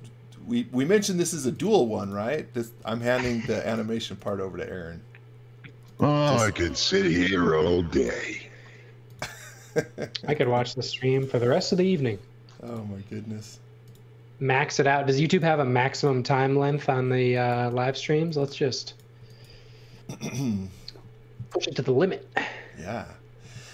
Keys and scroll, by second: 1.3 space, 2.8 r, 6.0 space, 7.2 r, 10.6 space, 11.9 r, 15.5 space, 17.2 x, 17.5 v, 19.1 x, 19.4 v.